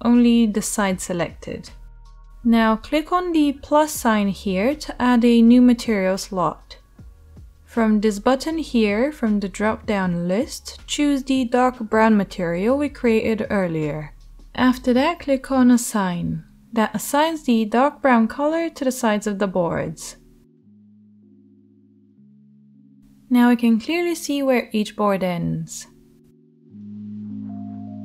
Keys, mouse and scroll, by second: 1.6-21.0 drag, 1.6-21.0 right drag, 22.3 Tab, 24.4-28.0 right drag.